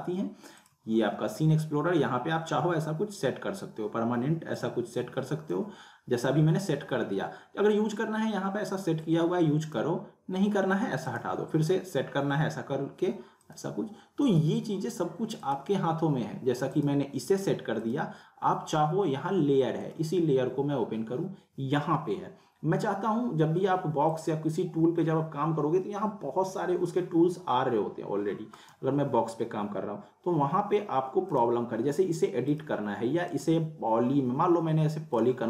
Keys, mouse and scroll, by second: 0.6 click, 4.5 click, 4.6-5.8 drag, 9.6 click, 13.5-20.2 drag, 24.1 click, 28.5 click, 28.6 right click, 31.3 click, 33.4 right click, 35.1 click.